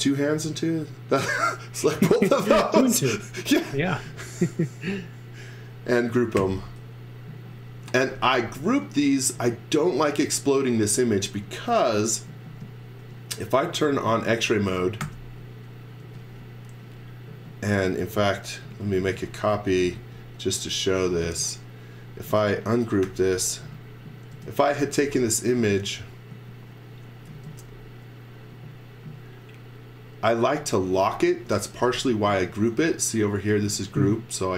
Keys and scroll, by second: 6.3 g, 7.8 x, 8.1 v, 9.3 space, 15.0 shift+5, 16.0 space, 17.0 space, 18.7 z, 19.0 x, 19.5 m, 21.2 space, 22.2-26.3 typing, 27.3 space, 28.3 space, 31.4 x, 33.0 space.